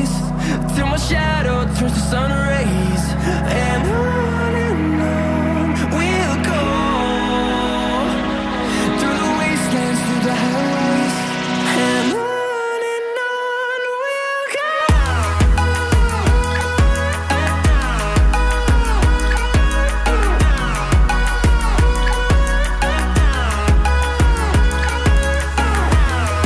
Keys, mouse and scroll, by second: 3.4 shift+click, 8.0 scroll down 1, 8.1 middle click, 11.3 double click, 11.9-12.3 scroll up 2, 21.4 Escape, 21.6 Escape.